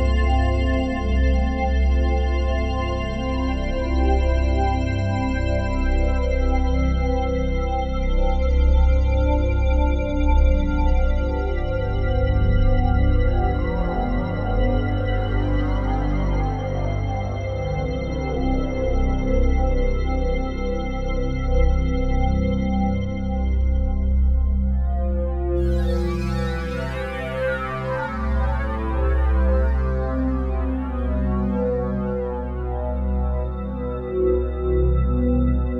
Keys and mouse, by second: 2.4 r, 2.7 x, 2.8 x, 5.4 Escape, 6.0 ctrl+alt+click, 7.8 alt+click, 9.6 typing, 9.7 ctrl+alt+click, 13.2 click, 14.3-14.7 typing, 16.8 Escape, 17.6-21.8 drag, 21.8-23.0 typing, 23.0 Escape, 23.7 click, 24.5-24.8 typing, 26.0 Escape, 26.0 typing, 27.1-28.3 drag, 28.3 ctrl+s, 28.3 typing, 28.6 alt+a, 29.5-31.4 ctrl+alt+drag, 32.3-35.2 drag, 35.5-35.7 typing.